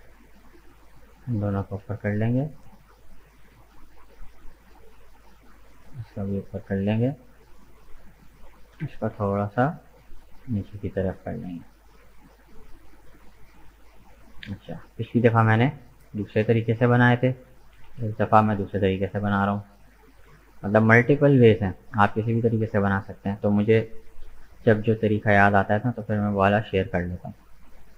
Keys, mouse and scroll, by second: 0.1 right click, 0.9 shift+right click, 1.6 g, 5.3 right click, 5.9 g, 8.3 right click, 8.8 g, 13.0 middle click, 13.9-14.3 scroll down 2, 14.3-18.0 shift+middle drag, 19.9 click, 20.4-21.0 scroll up 2, 21.0 right click, 21.5 shift+right click, 21.9 shift+right click, 22.4 shift+right click, 23.0-24.0 middle drag, 24.0 KP_1, 25.9-27.9 shift+middle drag.